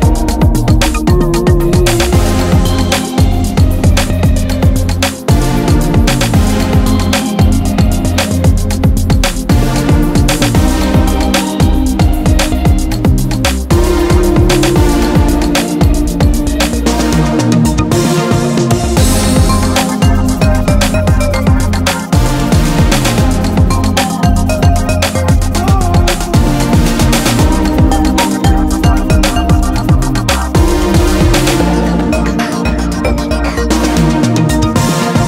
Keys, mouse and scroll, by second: 1.0 ctrl+r, 2.5 ctrl+r, 4.6 click, 4.8 Tab, 5.2 Tab, 6.7 i, 7.8 click, 8.4 click, 9.7 Tab, 15.8 KP_3, 27.0 click, 31.8 click.